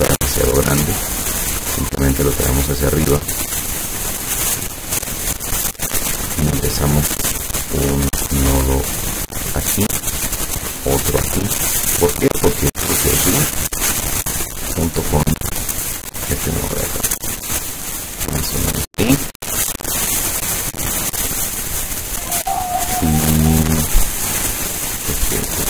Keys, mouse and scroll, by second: 1.1-5.9 drag, 7.9 click, 9.0 click, 10.6 click, 12.3-14.4 drag, 15.5-19.5 drag, 25.1-25.6 drag.